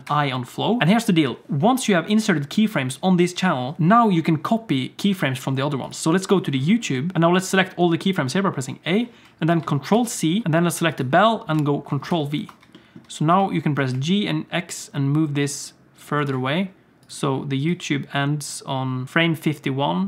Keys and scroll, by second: 0.0 i, 7.1 a, 9.9 ctrl+c, 12.1 ctrl+v, 13.3 g.